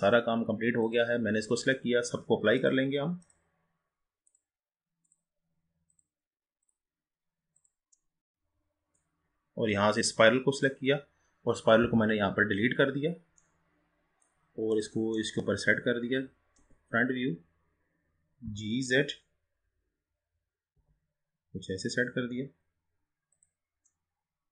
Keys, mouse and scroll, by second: 2.6-7.8 drag, 8.1-9.6 middle drag, 9.6-10.6 scroll up 3, 10.6 click, 12.7-13.5 scroll down 4, 13.5-14.8 middle drag, 14.8-15.1 drag, 15.3-16.7 middle drag, 16.7 KP_1, 17.3-18.5 scroll up 2, 18.5 g, 24.0-24.5 middle drag.